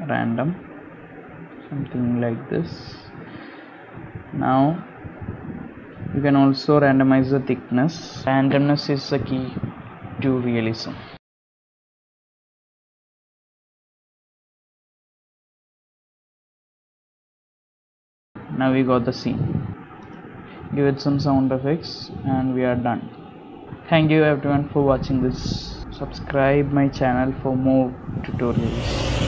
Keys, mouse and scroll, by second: 0.7 r, 2.5 g, 3.3 middle click, 3.7 g, 4.6 middle click, 5.3 middle click, 5.8 shift+middle click, 5.8 shift+middle click, 7.4 click, 8.6 click, 9.5 KP_0, 12.3 click, 13.2 click, 14.2 KP_0, 17.7 KP_0, 17.7 space, 19.7 space, 20.4 g, 21.6 space.